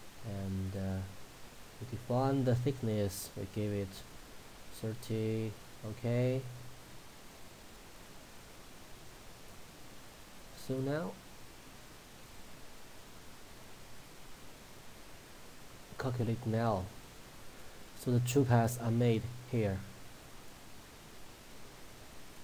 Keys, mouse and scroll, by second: 0.0 scroll down 1, 0.7 click, 5.7-6.7 drag, 7.8-8.4 middle click, 12.6 click, 16.6-17.8 middle drag, 19.9-20.8 middle drag.